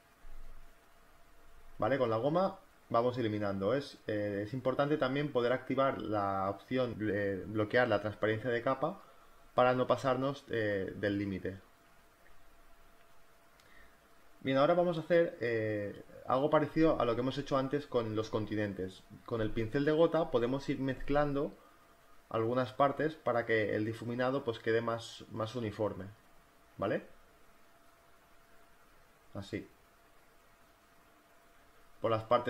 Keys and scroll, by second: 0.0-2.2 typing, 2.4 ctrl+z, 2.7 ctrl+z, 3.8-8.9 typing, 12.4 space, 19.5 [, 25.8-28.2 typing, 31.2-32.4 typing.